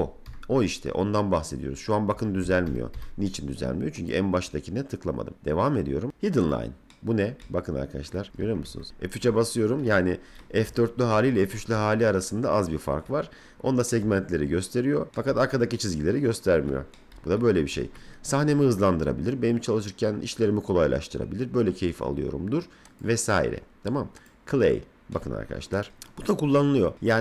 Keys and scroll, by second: 8.4 F4, 8.7 F3, 10.6 F3.